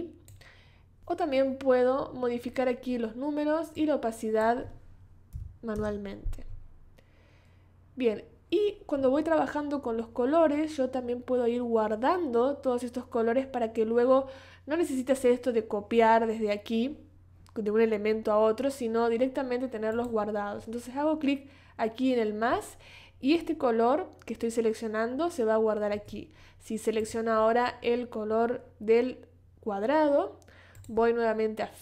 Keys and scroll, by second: 5.3 5, 5.8 Return.